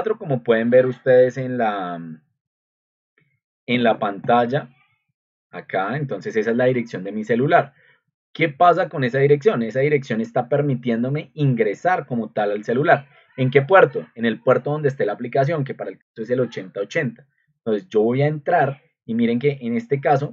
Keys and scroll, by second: 1.2 ctrl+z, 2.3 ctrl+2, 10.5 Escape, 16.0 Return.